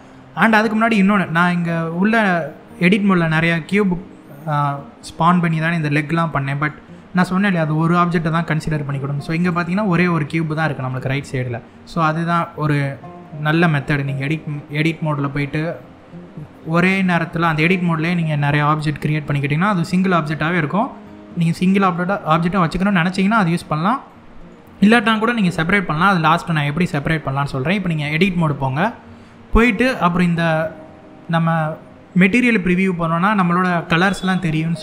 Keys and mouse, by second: 0.9 middle click, 2.0-2.5 middle drag, 3.5-4.2 middle drag, 6.0-6.3 middle drag, 9.1 click, 11.9-12.9 middle drag, 14.0-14.6 middle drag, 23.7-24.2 middle drag, 27.9 Tab, 33.7 click.